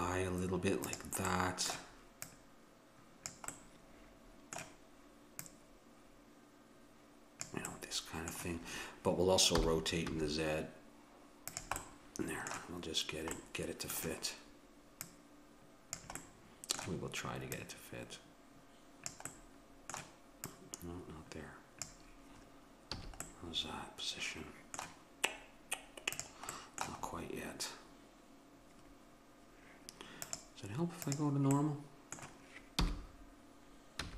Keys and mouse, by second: 1.3-3.3 middle drag, 2.3-4.2 drag, 3.6 middle click, 4.2-5.4 middle drag, 5.4-7.2 drag, 7.7-9.5 middle drag, 9.7 r, 11.8-15.0 middle drag, 15.0-16.7 drag, 17.5-19.3 drag, 19.7-21.8 middle drag, 20.5-22.3 drag, 23.0 a, 23.3-25.5 middle drag, 26.2-32.1 drag, 26.7-30.3 middle drag, 31.6 middle click, 32.1-34.1 middle drag, 32.8 r.